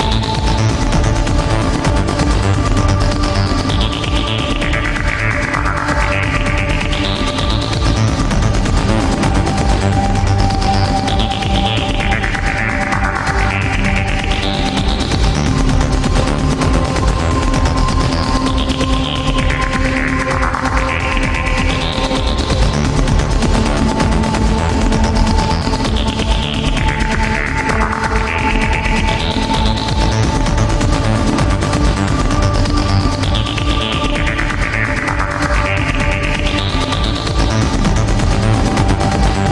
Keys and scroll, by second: 3.1 ctrl+z, 6.4 ctrl+z, 12.8 ctrl+z, 22.3 ctrl+z, 22.8 ctrl+z, 25.0 ctrl+z, 25.9 ctrl+z, 28.5 ctrl+z, 31.6 ctrl+z, 34.4 ctrl+z, 35.1 ctrl+z, 36.4 ctrl+z, 36.8 ctrl+z.